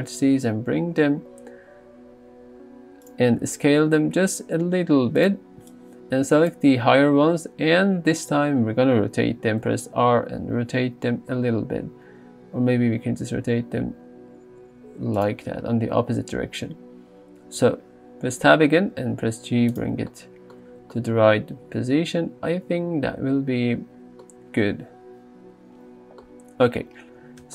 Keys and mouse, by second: 0.3 g, 3.4 s, 5.2 click, 5.7 click, 9.8 r, 15.2 click, 17.7 Tab, 18.9 g, 20.7 alt+z.